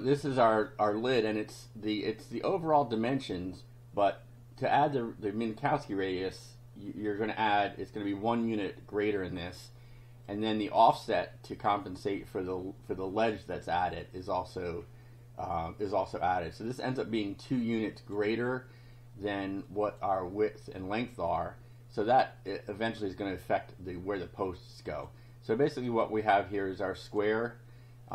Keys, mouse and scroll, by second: 0.3 click, 2.6 click, 4.2 click, 4.9 scroll up 1, 10.3 click, 17.5 click, 19.7 click, 21.0 click, 25.0 click, 26.1-27.3 drag.